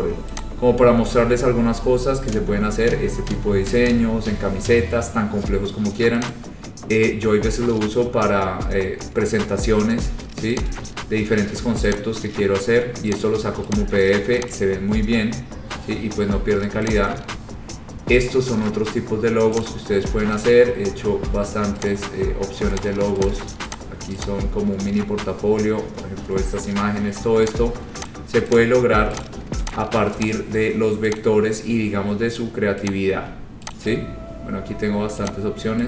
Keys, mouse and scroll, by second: 0.5 click, 1.2-2.0 scroll, 2.0 scroll down 11, 2.6-3.0 scroll down 2, 3.0-3.4 scroll up 4, 3.6 scroll down 3, 4.2-5.1 scroll, 6.4 click, 7.2 scroll, 8.1-9.1 scroll, 9.8 scroll, 10.8 click, 12.0 click, 13.3 click, 13.8 click, 14.6 click, 15.1-16.2 scroll, 17.0 click, 17.9-18.8 scroll, 19.8 click, 20.5-20.9 scroll, 22.0 click, 23.0 click, 23.4 click, 23.9 click, 24.4 click, 25.7-27.2 scroll, 27.6 click, 28.2 click, 28.7 click, 29.4 click, 29.8 click, 30.4 click, 31.3 click, 31.9 scroll, 33.0 click, 33.8 click, 34.4 scroll down 4, 35.4 click.